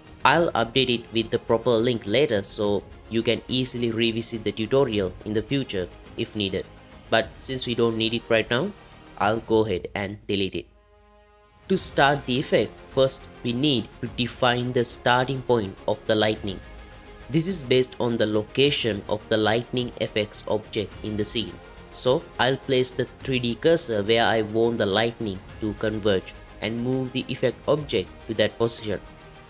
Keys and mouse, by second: 0.7 click, 5.9 click, 8.2 click, 9.3 click, 17.7 g, 20.6-23.4 drag, 24.1 shift+middle click, 26.2 shift+s.